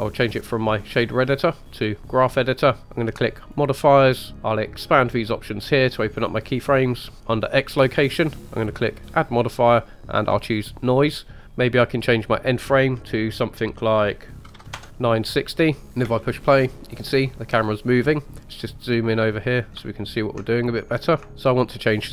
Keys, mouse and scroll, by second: 0.4-2.9 drag, 3.4 click, 4.3 click, 5.3-5.6 drag, 7.1 click, 9.1-10.5 drag, 10.5 typing, 12.1-14.7 drag, 16.0 space, 16.6-17.1 scroll up 2, 18.4 ctrl+middle click, 19.9 ctrl+middle click, 20.7 middle click, 21.3 ctrl+middle click.